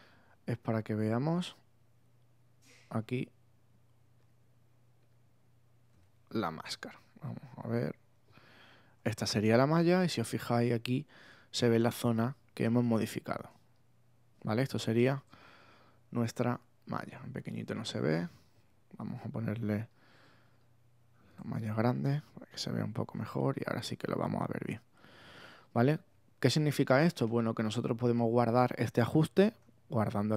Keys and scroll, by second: 9.0 super++, 9.5 super+space, 10.4 space, 15.6 super+-, 21.9 super+-, 25.4 space.